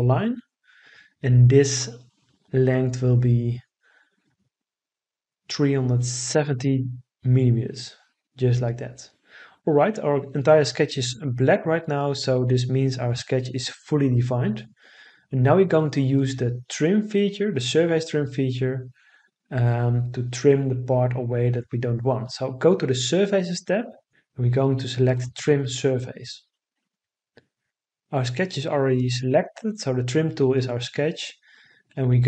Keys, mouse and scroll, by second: 4.1 3, 5.3 7, 6.0 0, 6.8 Return.